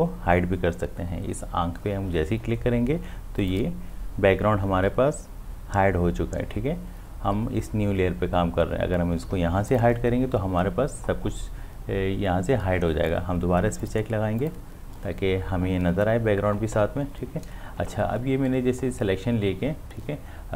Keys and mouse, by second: 3.4 click, 9.7 click, 13.8 click.